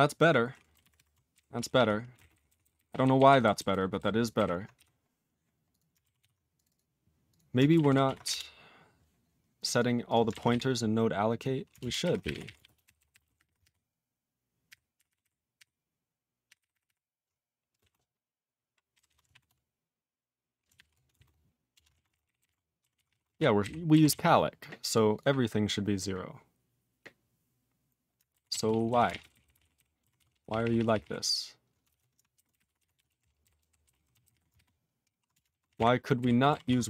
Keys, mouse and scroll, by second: 4.7 q, 5.7 click, 5.7 click, 6.2 ctrl+s, 6.5 click, 6.6 click, 6.6 double click, 6.7 double click, 7.2 click, 7.3 click, 7.8 ctrl+s, 8.2 Return, 9.5 click, 9.6 click, 9.6 double click, 9.7 double click, 10.0 click, 10.1 click, 11.7 ctrl+Return, 11.9-13.9 typing, 14.7 ctrl+r, 14.9 ctrl+r, 15.0 ctrl+r, 15.6 ctrl+r, 16.1 ctrl+r, 16.4 ctrl+r, 16.5 ctrl+r, 16.7 ctrl+r, 16.8 ctrl+r, 17.7 space, 17.8 {, 18.9 BackSpace, 19.0 BackSpace, 19.3 (, 20.7 ), 21.1 space, 21.1 {, 21.7 Return, 21.9 ctrl+a, 22.0 ctrl+space, 22.0 ctrl+e, 22.1 ctrl+n, 22.2 ctrl+n, 22.4 ctrl+e, 22.9 ctrl+s, 23.0 ctrl+p, 23.2 ctrl+space, 23.2 ctrl+e, 23.6 ctrl+g, 24.1 ctrl+s, 24.8 click, 24.9 click, 25.1 click, 25.1 click, 28.5 ctrl+s, 28.6 ctrl+p, 28.8 ctrl+a, 29.0 ctrl+space, 29.0 ctrl+e, 29.2 ctrl+n, 29.3 ctrl+n, 29.4 ctrl+n, 29.5 ctrl+g, 29.5 ctrl+e, 29.6 ctrl+n, 29.7 ctrl+n, 30.1 ctrl+s, 30.3 ctrl+p, 30.4 ctrl+p, 30.6 ctrl+p, 30.7 ctrl+p, 30.9 ctrl+p, 31.0 ctrl+e, 31.9 alt+>, 32.2-34.8 typing, 35.3 Return, 35.4 ctrl+a, 35.6 ctrl+space, 36.1 ctrl+g, 36.6 ctrl+s, 36.8 click, 36.8 click.